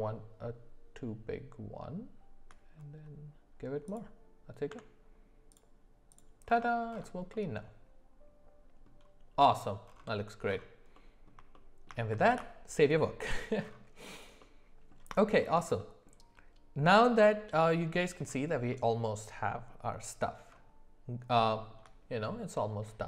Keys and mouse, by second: 4.7 Tab, 6.1 click, 7.3-8.9 middle drag, 11.0-11.3 middle drag, 11.5 shift+middle click, 12.3 ctrl+s, 18.7 middle click, 21.4 shift+middle click.